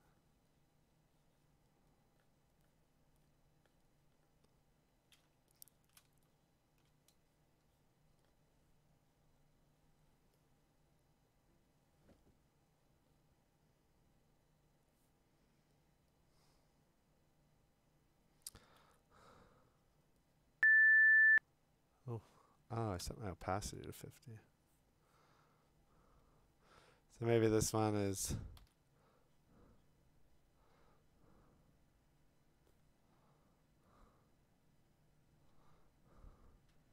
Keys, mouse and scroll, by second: 5.7-6.3 scroll, 6.0 click, 6.7 scroll, 6.8 click, 18.8 x, 23.0 0, 27.6-30.7 middle drag, 28.6 x.